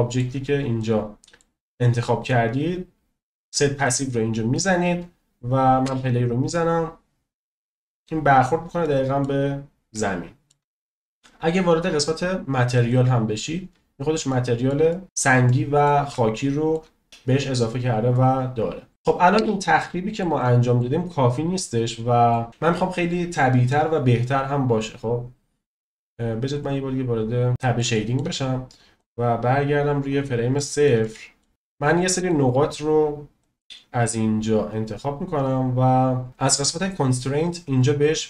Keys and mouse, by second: 0.7 middle drag, 0.9 drag, 1.2 middle click, 3.9-5.2 drag, 5.8 space, 8.9 middle click, 10.1-10.6 shift+middle drag, 13.1 drag, 14.2-14.6 shift+middle drag, 14.9 middle click, 15.4-15.8 middle drag, 16.1-16.7 shift+middle drag, 19.3 space, 19.8-20.2 shift+middle drag, 20.4 middle click, 21.9 middle click, 22.5 space, 26.6 click, 27.5 middle click, 27.9 shift+middle drag, 29.0-30.3 drag, 30.5 shift+middle drag, 31.0-31.4 middle drag, 31.5 shift+middle click, 33.4-34.8 drag.